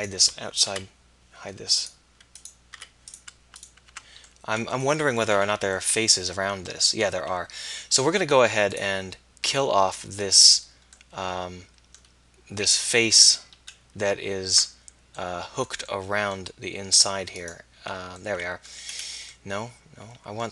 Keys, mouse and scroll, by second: 0.8 h, 2.8 h, 4.0 Tab, 18.3 middle click.